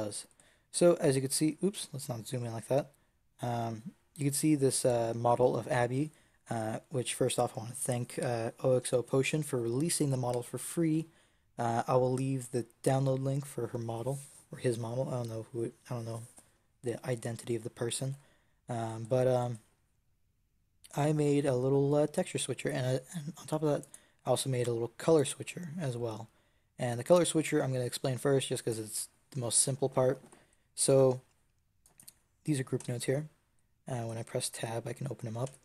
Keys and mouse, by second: 0.2 middle click, 0.8-4.1 middle drag, 24.3-31.7 middle drag, 31.7 right click, 32.7 Tab, 35.3 Tab.